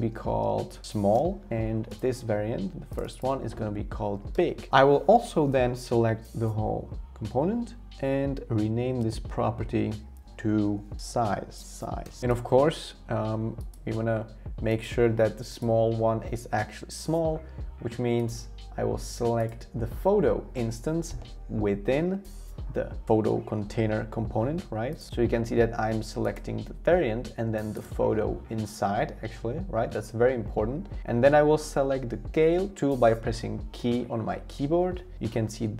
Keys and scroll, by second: 0.0-1.1 typing, 1.1 Return, 3.9-4.6 typing, 10.8-11.9 typing, 33.8 k.